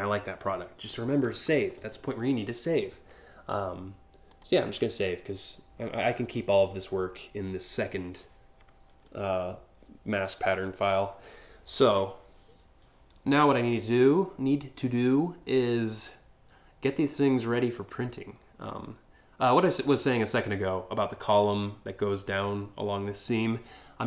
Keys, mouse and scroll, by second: 4.0 click.